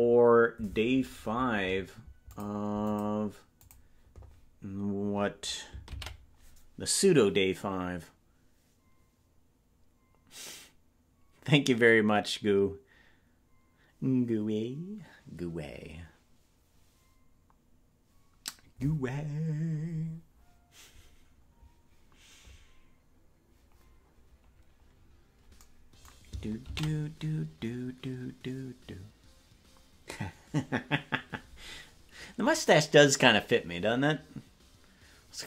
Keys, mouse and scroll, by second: 2.2 click, 2.8 click, 3.5 click, 9.2 ctrl+s, 19.4-23.5 scroll down 2, 25.0-25.6 scroll up 2, 25.6-30.0 scroll up 1, 30.0 ctrl+s.